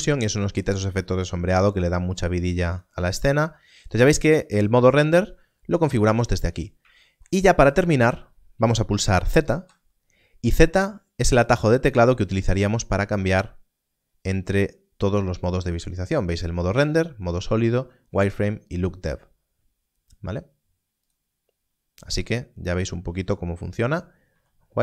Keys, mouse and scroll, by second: 7.8-9.5 scroll down 1, 21.0 z, 22.1 click, 22.8 z, 24.3 z.